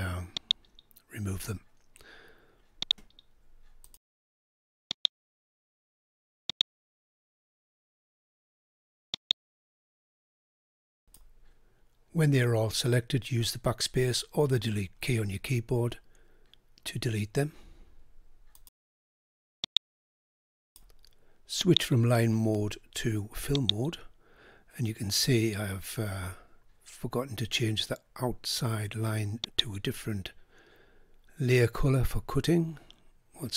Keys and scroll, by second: 13.1 Delete.